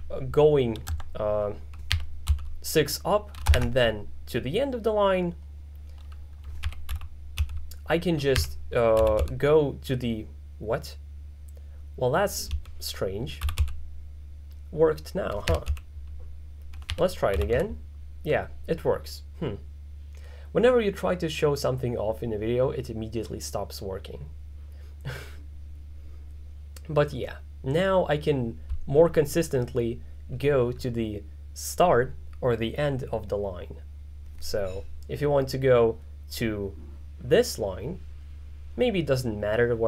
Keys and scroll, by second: 0.0-0.7 typing, 1.9 6, 2.3 k, 3.6 shift+4, 6.4-9.7 typing, 12.6-14.1 typing, 15.3-18.0 typing.